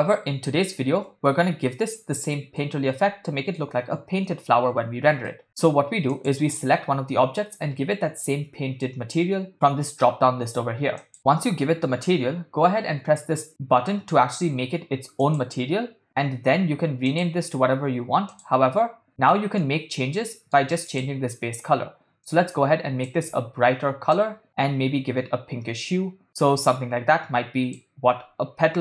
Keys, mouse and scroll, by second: 2.6-3.7 middle drag, 5.3 shift+middle click, 6.1 click, 11.0 click, 15.2 click, 17.1-18.4 drag, 19.3 middle click, 20.4 middle click, 20.9 click.